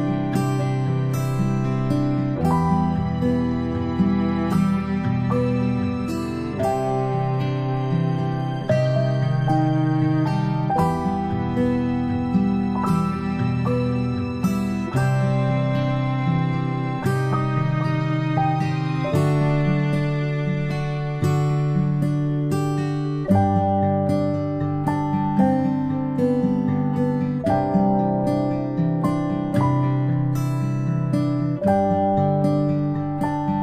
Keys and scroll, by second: 2.1 space, 2.1 space, 5.4-6.1 space, 8.7 space, 8.8 space, 9.3 space, 14.8 ctrl+alt+a, 15.9 v, 19.4 a, 27.0 ctrl+alt+a, 29.4-32.5 typing.